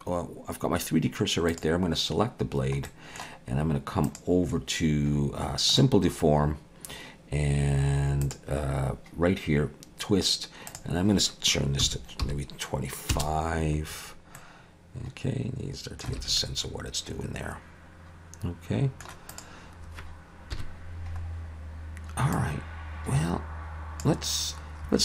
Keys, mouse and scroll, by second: 1.5 click, 2.9 middle click, 4.1 click, 8.2 click, 10.8 click, 14.4 middle click, 16.2 alt+a, 16.4 middle click, 19.3 click, 20.5 KP_1, 21.2-22.3 scroll up 1, 22.3 click, 22.3-23.5 scroll up 1.